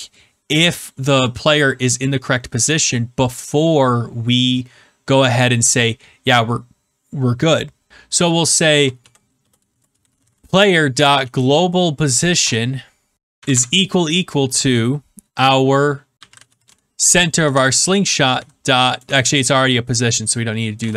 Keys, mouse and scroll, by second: 7.9-11.8 typing, 12.3 Return, 13.3 =, 13.4 =, 15.9-17.2 typing, 17.4 Return, 18.3-19.4 typing, 19.9 Right, 20.5-20.9 typing.